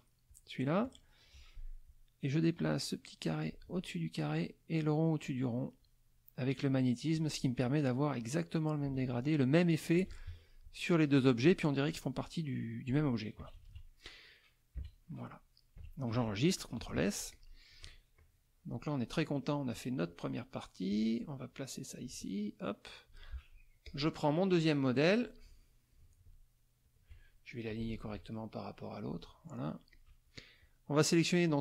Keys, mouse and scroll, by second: 0.3 shift+click, 2.6-3.7 drag, 4.8-6.0 drag, 8.2-10.1 drag, 10.3 ctrl+F1, 11.1 click, 13.4 KP_Subtract, 14.8 KP_Subtract, 15.7 KP_Subtract, 16.3 middle click, 16.8 ctrl+s, 17.3 ctrl+click, 17.7-19.3 ctrl+drag, 19.4 middle click, 20.9-23.3 drag, 23.4 ctrl+middle click, 23.8 ctrl+click, 24.5-26.1 drag, 26.9 shift+click, 27.9 ctrl+shift+a, 29.1 click, 29.5 middle click, 29.9 click, 30.6 click, 31.4 click.